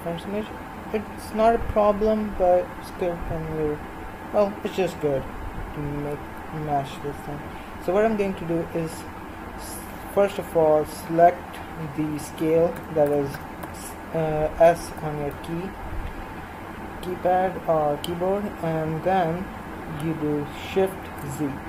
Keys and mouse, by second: 6.2 s.